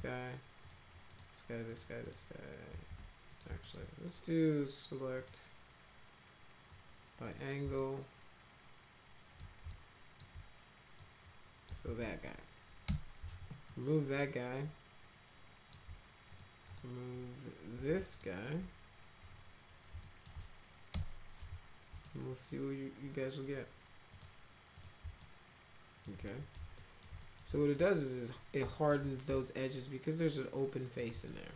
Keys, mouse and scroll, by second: 0.6 ctrl+click, 1.0 ctrl+click, 1.6 ctrl+click, 2.0 ctrl+click, 2.6 ctrl+z, 3.2 click, 3.6 alt+middle click, 5.1 click, 7.2 click, 7.7-9.3 alt+middle drag, 9.6 alt+middle click, 10.9 click, 11.8 ctrl+z, 12.8 Delete, 13.6-15.6 alt+middle drag, 16.2 click, 18.0 ctrl+click, 20.0 alt+middle click, 20.9 Delete, 21.9 middle click, 24.0 click, 24.7 click, 25.1 alt+middle click, 26.2 middle click, 26.7 alt+middle click, 27.1 middle click, 27.6 alt+middle click, 28.6 alt+middle click, 29.3-30.9 alt+right drag, 31.1 right click.